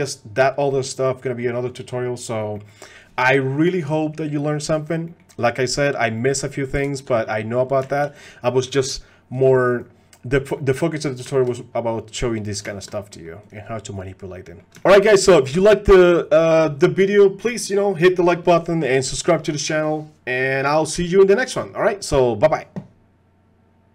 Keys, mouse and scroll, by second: 0.7 click, 2.6 click, 5.1 click, 6.2 click, 7.1 middle click, 7.9 shift+middle click, 8.2 middle click, 9.3 click, 10.6 middle click, 11.3 shift+middle drag, 12.7 shift+middle click, 13.1 click, 14.4 click.